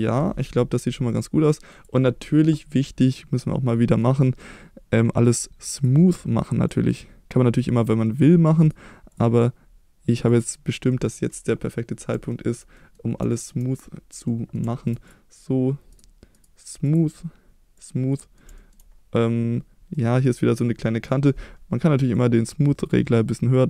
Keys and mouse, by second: 0.4 click, 0.7 middle drag, 1.7 click, 3.8 middle click, 5.2 right click, 7.6 middle drag, 8.0 middle drag, 8.6-9.2 right drag, 10.3-10.9 drag, 10.9-12.0 middle drag, 12.3 shift+middle drag, 12.7 middle drag, 13.3 shift+middle click, 14.3-14.6 middle drag, 14.7 shift+middle click, 15.1 click, 16.0 right click, 16.3 right click, 17.8 click, 18.2 middle drag, 18.6 shift+middle drag, 20.0 middle drag, 22.1-23.6 drag.